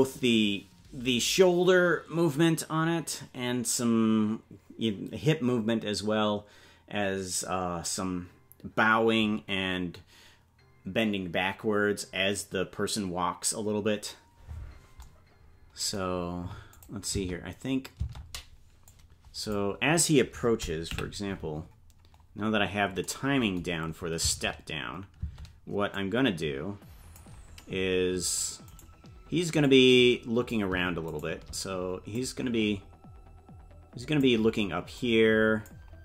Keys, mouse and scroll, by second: 16.7 click, 17.1 space, 18.8 click, 18.8 space, 20.9 KP_Decimal, 21.5-22.5 scroll down 6, 22.5 scroll down 2, 24.2 space, 25.6 space, 25.9-27.2 drag, 28.8 right click, 29.6 click, 31.2 shift+right click, 32.1-34.3 drag, 35.0 click.